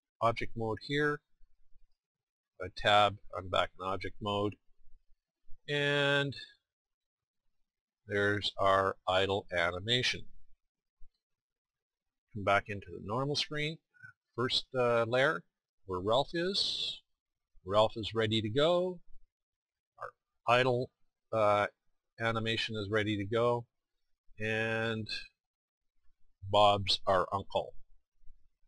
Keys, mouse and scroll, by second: 1.8 Tab, 7.9-9.9 middle drag, 19.2 middle click, 24.3-25.9 middle drag, 27.6-28.6 middle drag.